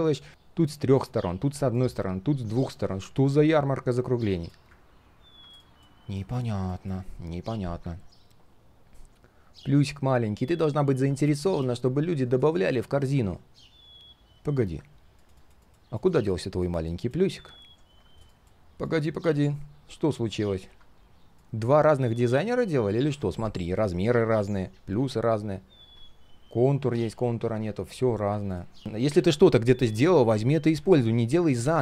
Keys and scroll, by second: 17.4 ctrl+c, 20.6 ctrl+v.